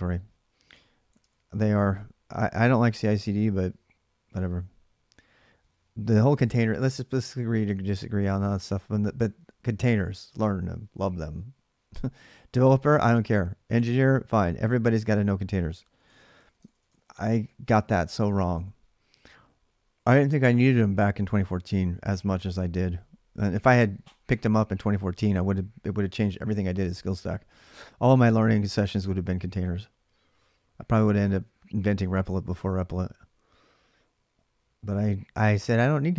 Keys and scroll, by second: 1.0 alt+Tab, 16.2-18.8 typing, 22.9-23.6 h.